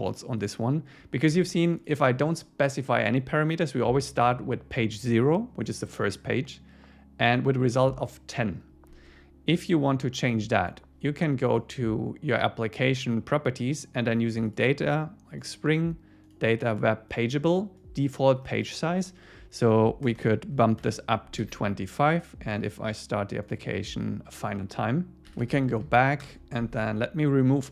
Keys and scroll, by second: 1.4 super+1, 21.4 super+s, 26.2 Return.